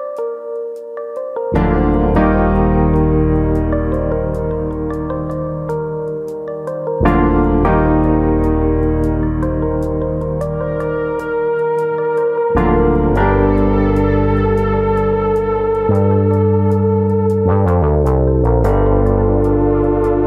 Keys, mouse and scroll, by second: 0.0 middle click, 0.9 KP_1, 1.6 scroll up 1, 1.8 shift+middle click, 2.5 click, 6.5 middle click, 7.1 s, 8.0 click, 8.3 KP_1, 11.0 e, 12.7 click, 13.6 click, 15.6 alt+click, 16.0 alt+click, 16.2 click, 17.5 alt+click, 18.0 click.